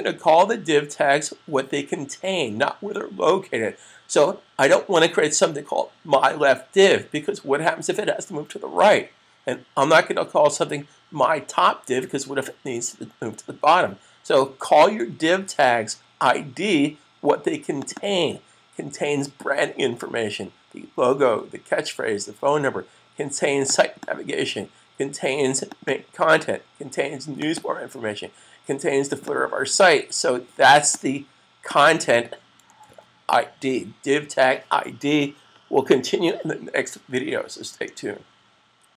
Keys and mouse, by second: 17.8 click, 17.8 double click, 23.6 click, 23.9 double click, 25.4 click, 25.8 double click, 27.3 click, 27.4 double click, 28.9 click, 29.2 double click, 30.9 click, 32.8 super+s.